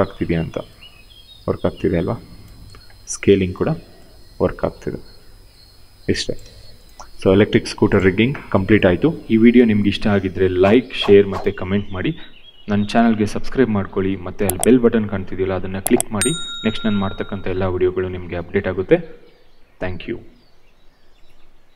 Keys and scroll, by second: 2.1 ctrl+z, 3.3 r, 6.1 ctrl+z.